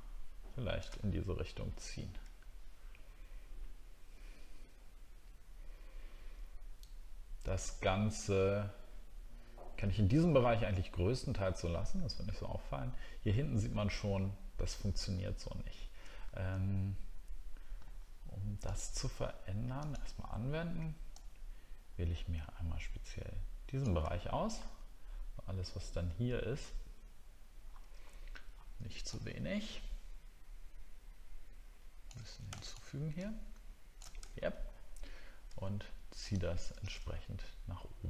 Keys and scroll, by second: 24.2 alt+scroll up 1, 25.1 alt+scroll up 1, 34.3 alt+scroll down 1.